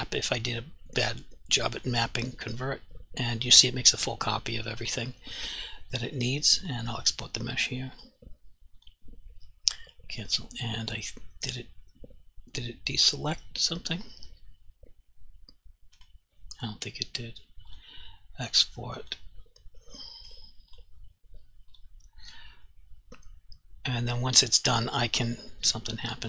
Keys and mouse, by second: 1.8 click, 3.6 g, 4.9 right click, 11.1 g, 16.0 right click, 25.7 g.